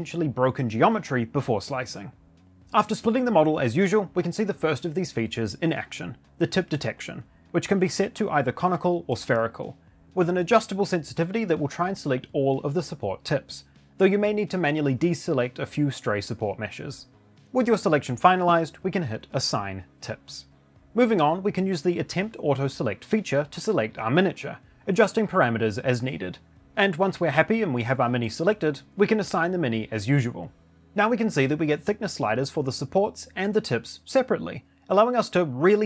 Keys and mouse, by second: 14.3 ctrl+click.